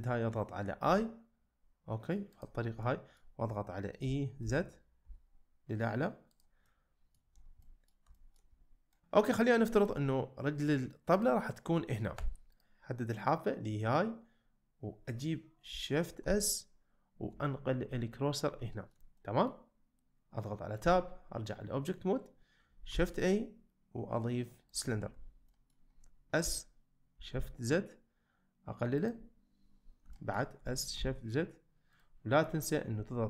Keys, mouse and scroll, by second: 0.8 i, 2.8 middle click, 4.0 e, 4.4 z, 5.0 z, 6.6 middle click, 7.6 middle click, 8.2 shift+middle click, 8.9 middle click, 11.2 click, 12.2 2, 12.5 click, 16.3 shift+s, 17.9 middle click, 18.7 shift+middle click, 19.2 middle click, 20.8 Tab, 22.9 shift+a, 25.5 middle drag, 26.4 s, 27.3 shift+z, 30.1 shift+middle click, 30.6 s, 31.0 shift+z, 31.9 click.